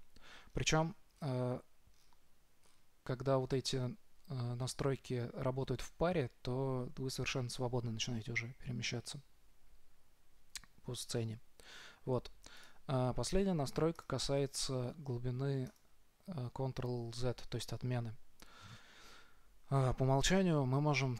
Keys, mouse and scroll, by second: 0.8-7.6 middle drag.